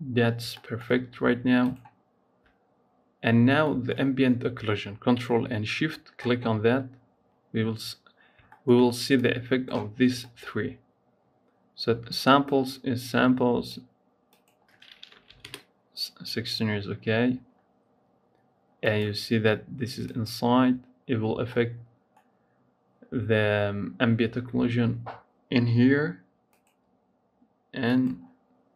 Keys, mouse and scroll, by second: 1.4 ctrl+shift+click, 2.8-3.5 scroll up 2, 3.5 shift+middle click, 3.8-6.8 scroll up 1, 6.9-7.3 scroll up 1, 7.3-8.0 scroll down 1, 8.0-8.5 scroll down 4, 8.5 shift+middle click, 9.0 click, 9.8 scroll up 2, 10.0 shift+middle click, 10.4-12.4 scroll up 1, 12.4-17.2 drag, 18.8 click, 19.9 click, 21.4-24.3 middle drag, 26.4 click, 27.7 click.